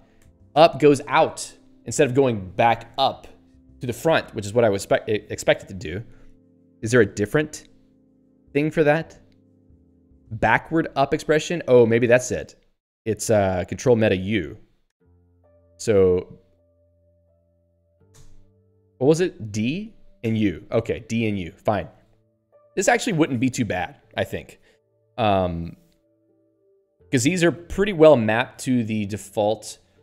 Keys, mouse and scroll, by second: 0.2 ctrl+alt+e, 15.0 ctrl+alt+u, 16.0 ctrl+alt+b, 18.1 ctrl+alt+f, 18.8 ctrl+alt+b, 19.5 ctrl+alt+d, 20.2 ctrl+alt+u.